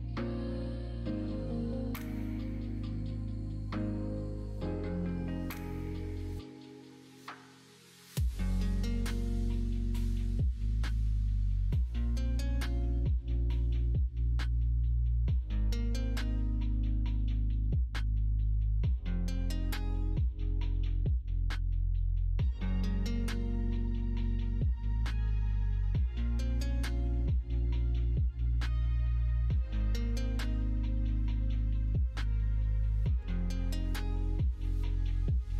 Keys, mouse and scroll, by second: 6.9-9.9 drag, 11.0 middle click, 11.9 s, 14.2 s, 15.2 middle click, 16.3 f, 17.8 shift+Tab, 18.5 middle click, 19.4 s, 21.2 g, 24.6 middle click, 25.5 s, 27.3 g, 30.5 s, 33.1 shift+e, 35.1 middle click.